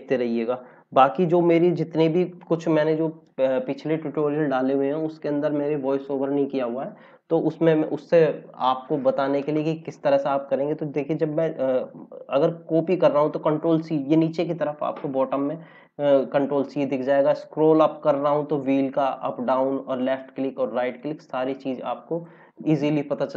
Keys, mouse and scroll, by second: 12.8 ctrl+c, 17.8 scroll up 1, 19.3 scroll down 1, 19.8 right click, 20.9 click.